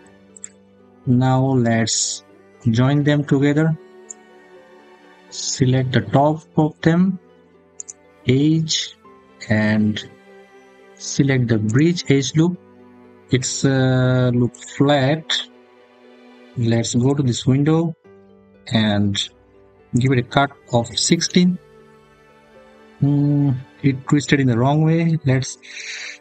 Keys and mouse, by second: 0.2 click, 0.6 middle click, 7.7-11.6 drag, 12.5 click, 16.8 click, 19.7-21.7 drag, 26.0-26.2 drag.